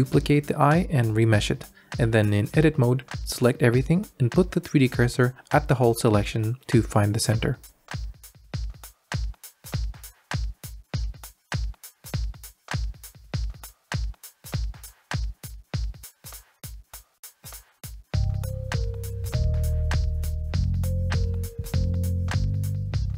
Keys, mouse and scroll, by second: 2.0 a, 2.2 a, 3.3-4.2 drag, 4.9 Tab, 5.4 a, 6.2 shift+s, 8.6 Tab, 9.2 g, 10.5 x, 13.5 g, 15.8 alt+middle click, 16.3 g, 18.3 alt+click, 18.7 click, 19.1 g, 21.3 Tab, 21.4 v, 22.0 click.